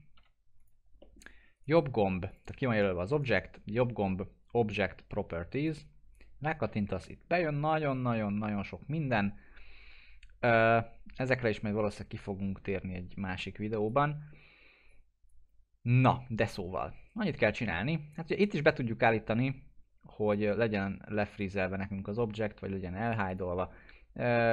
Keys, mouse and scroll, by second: 0.0 scroll down 1, 0.2 p, 0.6 click, 1.0 middle click, 1.5 right click, 2.3 click, 3.1 right click, 5.6 click, 13.4-14.0 drag.